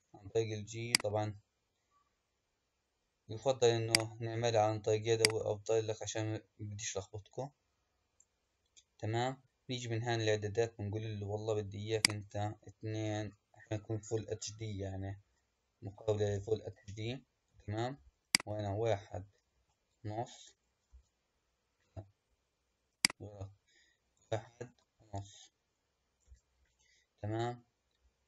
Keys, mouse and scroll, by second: 3.7-5.2 drag, 11.8-15.0 drag, 18.1-21.3 drag, 22.8-25.9 drag.